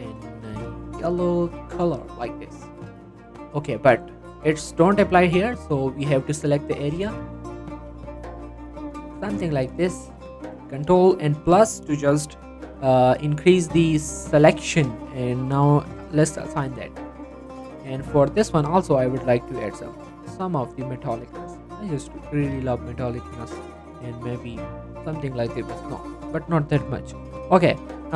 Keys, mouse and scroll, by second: 2.7-3.6 scroll down 1, 3.6-4.0 scroll up 1, 5.6 click, 8.3 z, 9.2 click, 9.8 middle click, 10.0 z, 13.0 scroll down 1, 13.2 shift+middle click, 16.0 click, 16.5 Tab, 16.7 scroll down 1, 16.8 middle click, 17.2 z, 18.0 middle click, 19.4-21.8 drag, 22.0-22.5 scroll down 1, 22.5 click, 22.8-23.2 scroll up 1, 23.2 scroll down 1, 23.4 middle click, 24.2 click, 25.6 right click, 25.8 click, 26.1 middle click, 26.3 scroll up 1, 27.0 shift+middle click, 27.3 click.